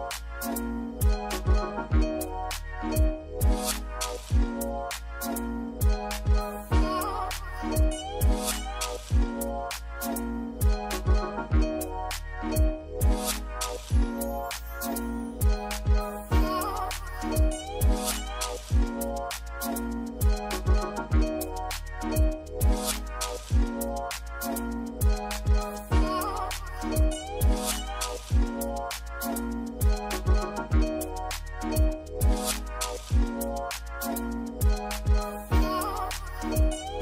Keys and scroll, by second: 1.0 d, 1.7 2, 3.4 4, 5.0-6.8 typing, 7.8 1, 17.4 z, 19.3 c, 20.8-22.7 typing, 24.1 8, 24.9 Escape, 25.5 z, 26.5 p, 27.8 l, 29.1 Escape, 35.3 typing, 35.6 Return.